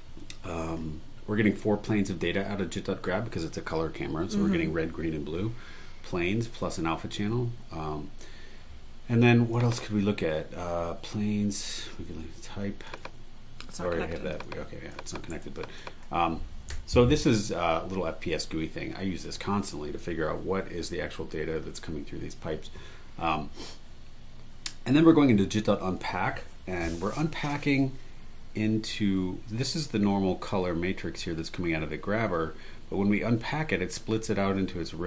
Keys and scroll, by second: 15.3 super+e, 16.7 BackSpace.